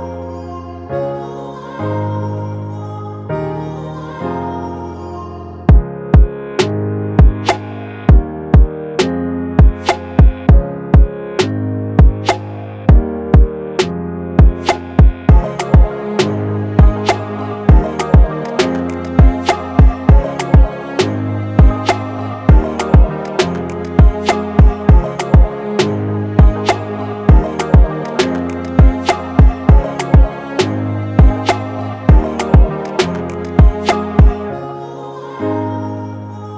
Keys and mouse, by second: 25.3 space, 28.5 0, 29.5 middle click, 32.9 0.